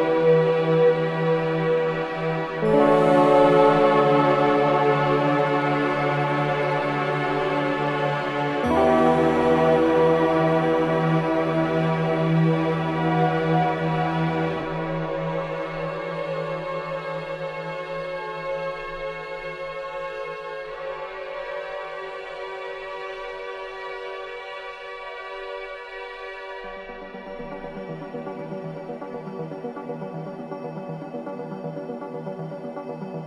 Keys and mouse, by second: 3.5 Tab, 4.8-6.1 alt+drag, 7.8-8.8 drag, 9.5 middle click, 9.6 click, 10.2 alt+middle click, 10.8-13.2 alt+shift+drag, 13.6 click, 14.5 alt+click, 15.5 click, 17.0 click, 18.3 click, 19.4 click, 20.0-21.3 drag, 22.7-25.7 alt+drag, 29.5 ▬, 30.9-32.0 drag, 31.8 typing, 32.9 alt+a.